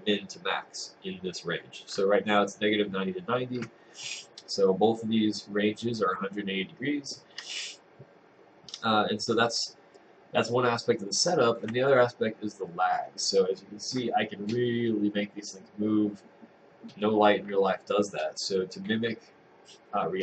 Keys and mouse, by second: 10.0 click.